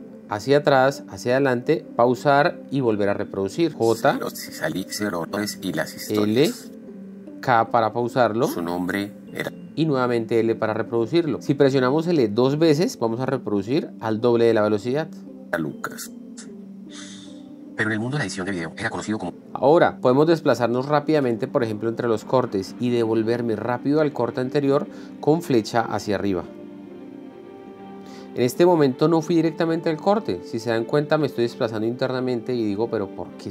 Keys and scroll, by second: 3.9 j, 5.5 l, 7.1 k, 8.3 l, 9.9 k, 15.7 l, 19.5 k, 27.0 Up, 30.5 Down, 32.0 Up.